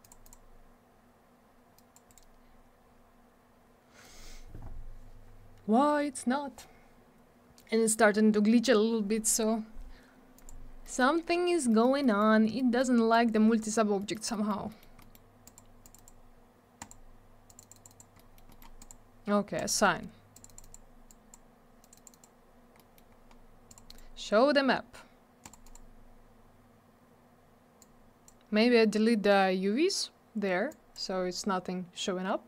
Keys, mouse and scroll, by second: 0.0 click, 0.1 click, 0.2 click, 0.3 click, 1.7 click, 1.9 click, 2.1 right click, 2.1 right click, 10.4 click, 10.8 middle click, 11.7 middle click, 12.0 middle click, 12.6 middle click, 13.1 click, 14.0 middle click, 14.1 middle click, 14.3 middle click, 14.5 double middle click, 14.7 middle click, 14.8 middle click, 15.0 middle click, 15.1 double middle click, 15.5 click, 15.5 click, 15.8 click, 15.9 double click, 15.9 click, 16.0 click, 16.8 click, 16.9 click, 17.5 click, 17.5 click, 17.6 click, 17.7 double click, 17.7 click, 17.8 click, 17.9 click, 18.0 double click, 18.2 middle click, 18.3 middle click, 18.5 middle click, 18.6 double middle click, 18.8 click, 18.9 click, 19.6 click, 19.6 click, 20.3 click, 20.4 click, 20.5 click, 20.5 double click, 20.6 click, 20.7 click, 21.1 click, 21.8 click, 21.9 click, 21.9 click, 22.0 double click, 22.1 click, 22.2 click, 22.8 middle click, 23.0 middle click, 23.2-23.7 scroll down 1, 23.7 click, 23.7 click, 23.9 right click, 23.9 double right click, 25.4 click, 25.5 click, 25.7 click, 25.7 double click, 27.8 click, 30.7 click.